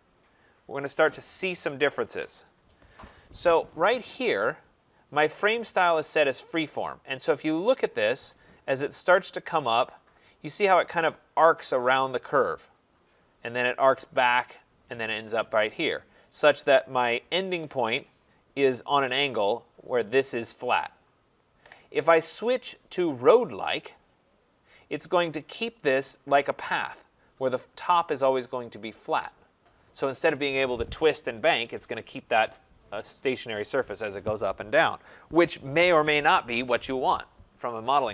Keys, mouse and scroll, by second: 2.0 Return, 4.5 click, 6.9-7.2 scroll, 8.3 right click, 8.4 middle click, 10.2 right click, 12.4 right click, 12.8-13.4 scroll, 16.3 middle click, 16.5 right click, 17.1 middle click, 17.2 middle click, 24.0 click, 25.3 middle click, 25.4 middle click, 25.5 middle click, 26.4 right click, 26.8-28.0 scroll.